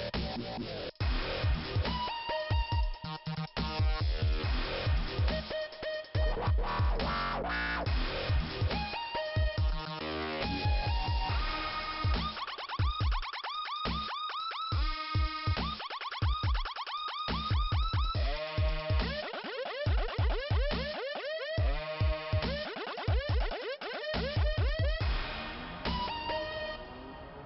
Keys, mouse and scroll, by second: 3.2 click, 5.2 click, 5.4 click, 8.0 click, 9.8 click, 11.7 click, 11.9 click, 12.1 click, 12.4 click, 12.8 click, 16.9 click, 20.3 click, 21.2 scroll up 2, 22.1 click, 25.0 click, 26.8-27.2 scroll up 1, 27.3 click, 27.4 click.